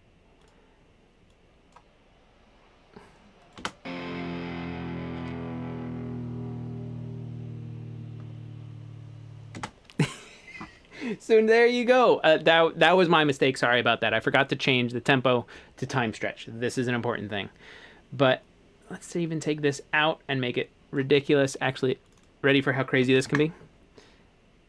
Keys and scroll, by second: 3.6 space, 9.6 space, 22.8-23.7 typing.